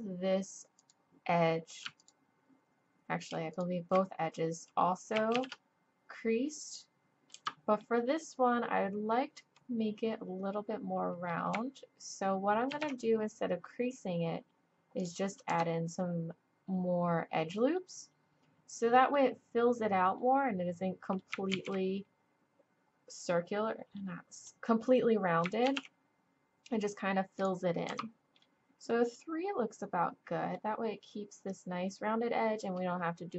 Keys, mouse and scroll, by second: 0.8-6.8 middle drag, 5.3 shift+e, 8.0 middle click, 8.8-9.8 drag, 9.8 middle click, 12.7 ctrl+r, 17.8-20.1 drag, 20.7 click, 21.5 ctrl+z, 24.2-25.6 drag, 25.6 ctrl+r, 30.0 middle click.